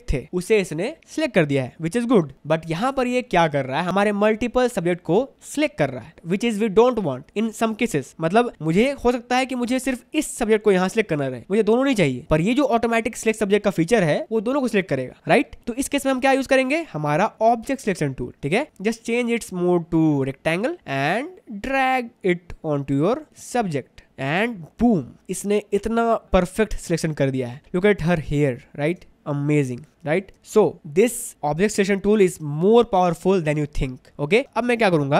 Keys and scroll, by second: 8.6 ctrl+d, 25.3 ctrl+alt+space, 27.6 space, 30.3 ctrl+alt+space, 34.4 space.